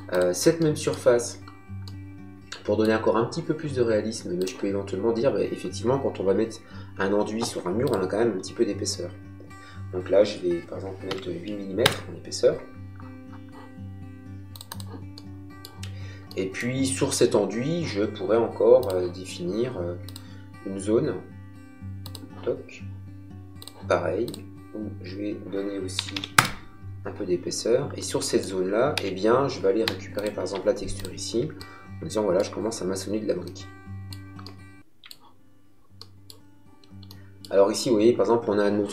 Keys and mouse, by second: 0.5 middle click, 4.3 click, 7.8 click, 11.0 KP_8, 11.7 Return, 14.4 click, 15.1 middle click, 18.7 click, 21.9 click, 23.5 click, 25.9 KP_2, 26.0 KP_5, 26.2 Return, 27.9 middle click, 28.9 b, 30.0 click, 31.5 middle click, 33.4 middle click.